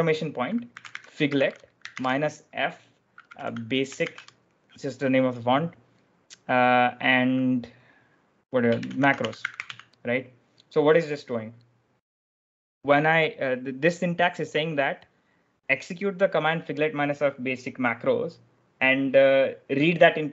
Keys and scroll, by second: 0.5-4.4 typing, 8.4-10.0 typing, 11.5 typing.